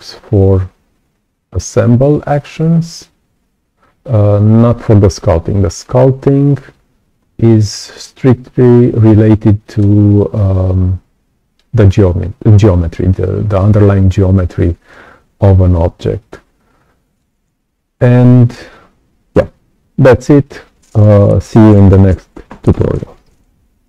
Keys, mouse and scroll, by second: 9.2 right click, 9.2 click, 13.5-14.8 right drag, 13.5-14.8 drag, 16.5 right click, 16.7 click.